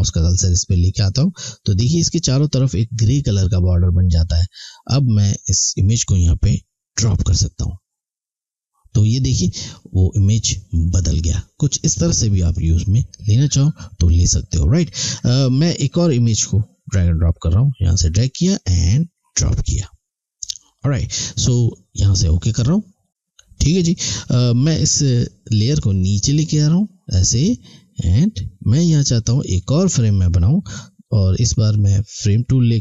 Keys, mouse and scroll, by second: 12.3 click, 16.2 click, 22.4 click, 25.0 click, 32.1 click.